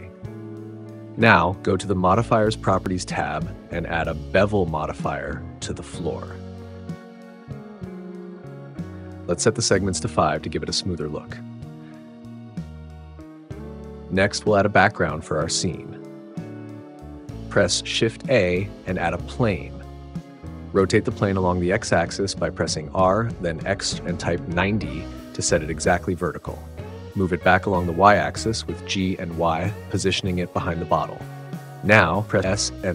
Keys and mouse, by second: 4.7-6.8 drag, 10.9-13.0 drag, 16.7 shift+a, 22.3 r, 22.7 x, 23.4 9, 23.6 0, 25.0-26.7 drag, 28.0 g, 28.6 y, 31.9 s.